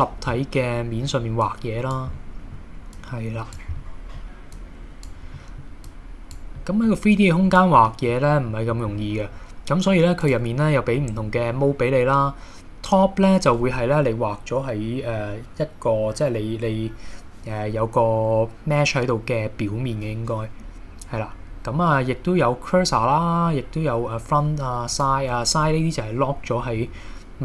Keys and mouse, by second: 0.4 middle click, 1.4 click, 2.2 middle click, 3.0 click, 3.8 middle click, 4.6 click, 5.4 middle click, 5.9 click, 6.6 middle click, 7.1 click, 7.8 middle click, 8.5 middle click, 10.3-25.4 drag, 26.8 KP_1.